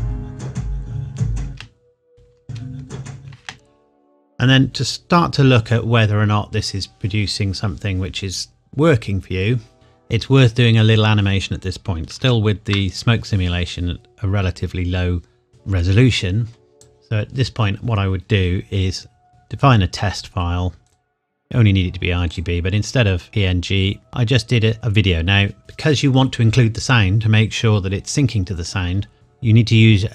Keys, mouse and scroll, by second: 1.4 space, 2.1 scroll down 1, 2.4 space, 4.8 click, 12.0 click, 12.2 ctrl+z, 16.7 click, 19.3 click, 20.9 click.